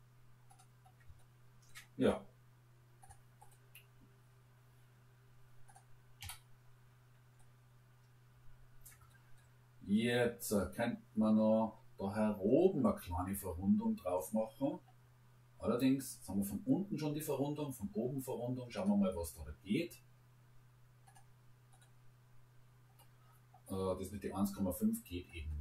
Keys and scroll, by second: 3.8 Delete, 6.2 Delete.